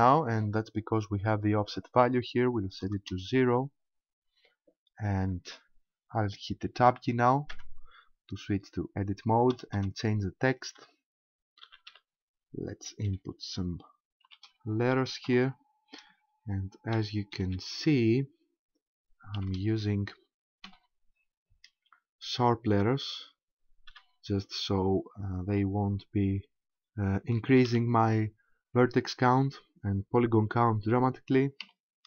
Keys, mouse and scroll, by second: 1.7 click, 7.5 Tab, 9.5 BackSpace, 9.8 BackSpace, 11.7 shift+n, 11.9 shift+h, 13.1 shift+t, 14.3 shift+k, 15.3 -, 17.0 shift+h, 17.3 shift+y, 17.5 shift+l, 19.5 shift+x, 20.7 -, 23.9 shift+v, 27.7 shift+l, 31.7 shift+e.